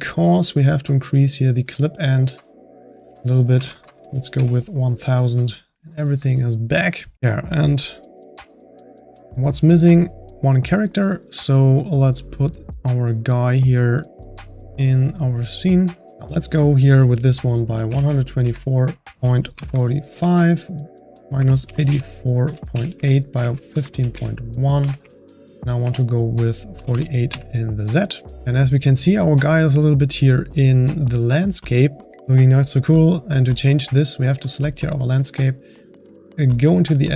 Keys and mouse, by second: 1.9-3.8 drag, 3.8 KP_0, 4.0 KP_0, 8.1-16.1 drag, 16.5-19.1 drag, 25.0 Tab, 28.4 click, 33.4 click, 36.2 click.